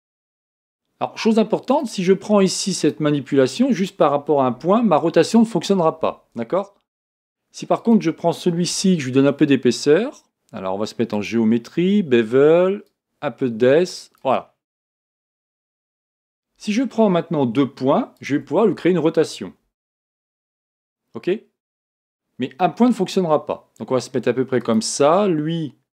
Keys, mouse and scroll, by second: 0.2 g, 2.8 click, 4.6 r, 7.8 click, 8.7 Tab, 11.1 click, 12.9-14.7 drag, 14.7 Tab, 15.2-15.7 scroll up 4, 15.7-18.2 scroll down 2, 18.2 shift+click, 19.7 r.